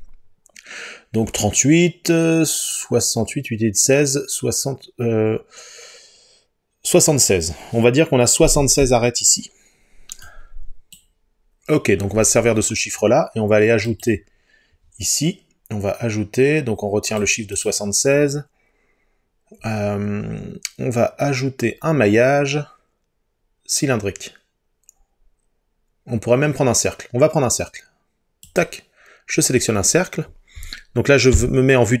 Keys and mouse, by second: 13.9-17.2 drag, 17.6-28.7 drag, 31.4 KP_7.